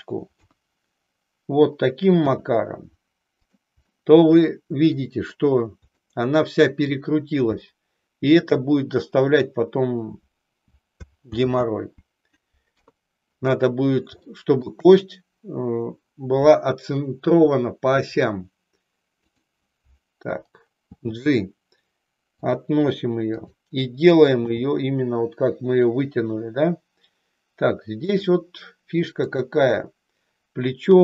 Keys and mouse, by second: 0.5 KP_1, 2.4 e, 4.0-5.1 middle drag, 6.1-7.1 middle drag, 7.9 shift+middle click, 11.4 ctrl+z, 12.9 KP_3, 14.5 shift+middle click, 19.2 click, 20.9 g, 23.2 click, 24.6 g, 28.1 click, 29.3 click, 30.9 g.